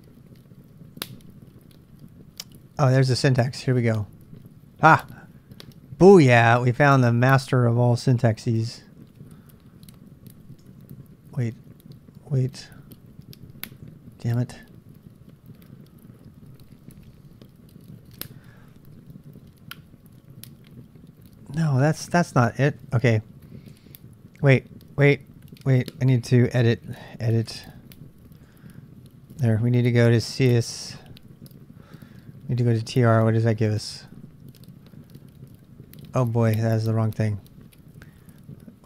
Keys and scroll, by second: 0.0-0.9 typing, 4.8-7.0 typing, 10.4-12.3 typing, 11.4 ctrl+[, 13.8 typing, 23.7 h, 24.6 l, 27.5-32.6 typing, 32.6 Return, 36.1-36.9 typing.